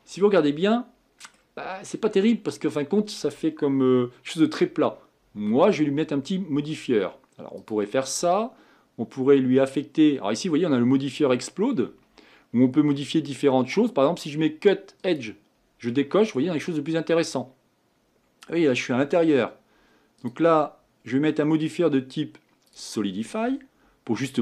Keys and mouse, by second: 0.8 middle click, 1.3-16.0 middle drag, 16.0-16.9 drag, 16.9 middle click, 17.9 middle click.